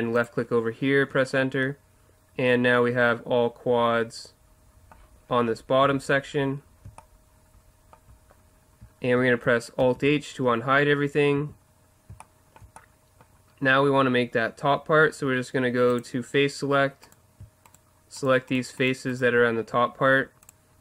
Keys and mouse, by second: 5.8 a, 9.8 alt+h, 11.4 a, 15.9-17.7 drag, 17.0-20.8 right drag.